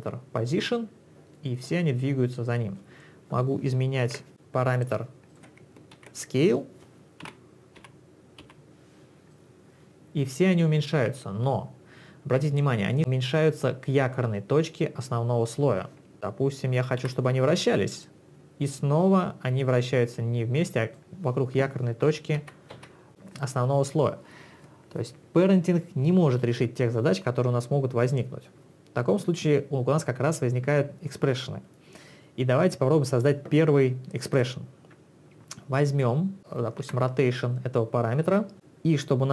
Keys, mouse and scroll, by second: 4.0 ctrl+z, 4.3 click, 5.3 click, 6.0 ctrl+z, 7.3 s, 7.8 s, 8.5 s, 9.3 click, 17.0 r, 18.1 click, 22.4 ctrl+z, 23.3 click, 34.4 click, 36.9 r.